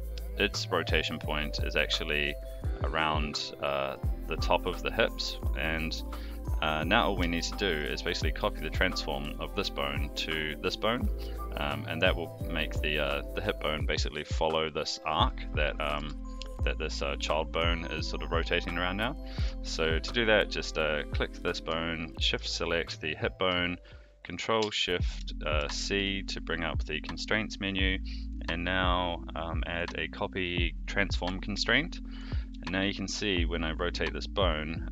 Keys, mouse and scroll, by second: 7.3-7.8 shift+middle drag, 8.5 click, 11.1 click, 15.2 click, 15.8 click, 15.9 r, 20.0 click, 22.3 shift+click, 32.1 click, 32.5 r.